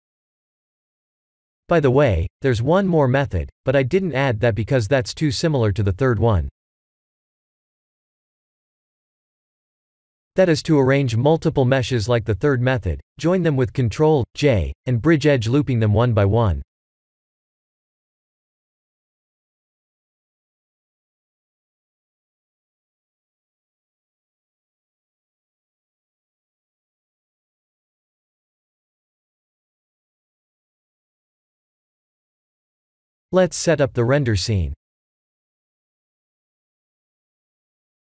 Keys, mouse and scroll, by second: 0.3 middle click, 3.2 click, 3.8 shift+middle click, 4.4 shift+a, 9.1 scroll up 3, 9.8 shift+d, 12.0 shift+click, 13.2 ctrl+j, 13.9 Tab, 14.4 1, 16.0 2, 16.5 ctrl+e, 18.8 Tab, 19.0 middle click, 22.2 click, 22.4 x, 22.8 middle click, 25.3 click, 25.7 click, 26.6 click, 27.4 scroll down 2, 29.5 click, 31.4 ctrl+a, 31.9 click, 32.3 scroll down 3, 32.7 middle click, 33.5 scroll up 1, 33.8 shift+middle click, 34.4-35.0 scroll up 2, 35.1 middle click, 36.1 click, 36.3 g.